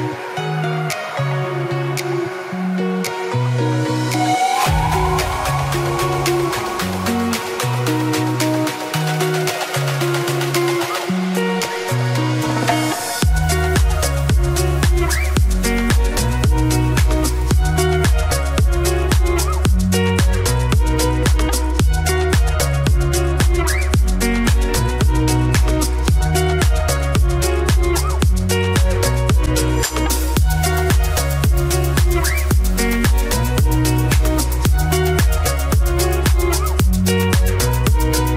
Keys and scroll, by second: 3.7 Delete, 6.1 Delete.